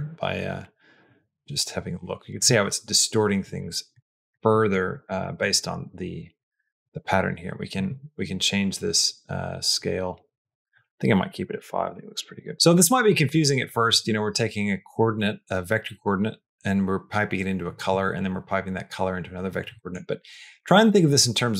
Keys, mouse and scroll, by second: 3.4 middle click, 3.9 middle click, 4.3 middle click, 4.8 middle click, 5.1 middle click, 6.3-10.4 drag, 10.6-12.3 drag, 12.8 click, 19.7 middle click.